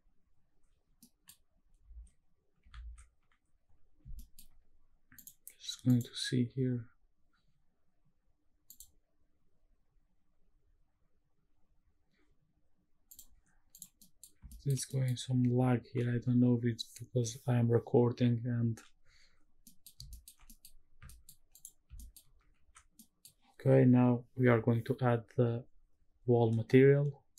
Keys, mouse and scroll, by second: 0.0 middle click, 0.3 click, 1.0 middle click, 1.4 scroll up 1, 1.9 ctrl+s, 2.4 ctrl+s, 4.2 shift+middle click, 5.1-6.5 drag, 13.7 click, 14.0 middle drag, 14.5 shift+middle click, 14.9 middle click, 19.6 middle click, 20.1 shift+middle click, 20.4 middle click, 21.1 shift+middle click, 21.5 click, 22.0 shift+middle click, 22.6 ctrl+s, 23.0 middle click.